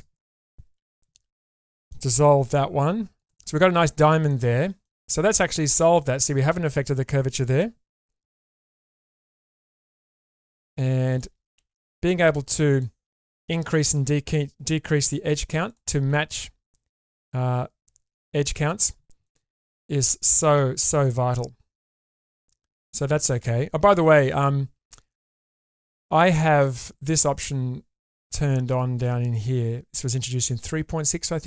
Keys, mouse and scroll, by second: 0.7 ctrl+x, 1.5 middle click, 3.2 click, 3.2 1, 4.3 middle click, 5.7 middle click, 8.5 g, 9.5 g, 11.1 click, 11.5 g, 13.3 click, 13.7 g, 15.7 click, 16.1 g, 19.2-20.5 middle drag, 20.8 scroll down 1, 21.0-22.1 middle drag, 22.8 Tab, 23.4 Tab, 24.1 Tab, 24.7-25.7 scroll down 1, 25.7 Tab, 25.7 scroll down 1.